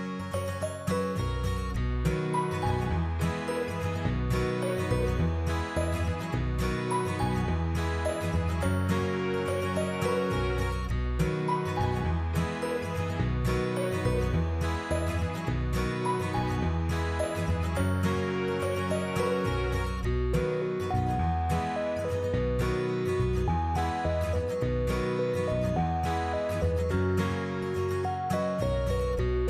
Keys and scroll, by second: 6.7 Down, 7.1 shift+Up, 8.9 ctrl+-.